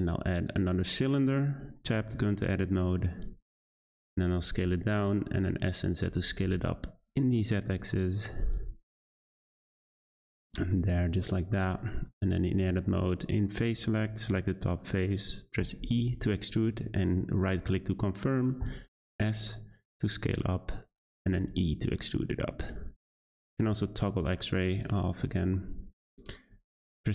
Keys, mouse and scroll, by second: 0.7-1.3 scroll down 2, 1.3 Tab, 1.8 a, 1.9 s, 4.4 s, 6.1 Tab, 6.4 g, 10.5-10.9 shift+middle drag, 10.9-11.2 scroll up 3, 11.2-12.1 middle drag, 12.1 Tab, 12.7 3, 13.8 click, 14.2 shift+middle click, 14.9-15.6 scroll up 1, 15.6 e, 18.6 s, 21.3 e, 23.6 z, 25.2-26.5 middle drag, 26.5 2.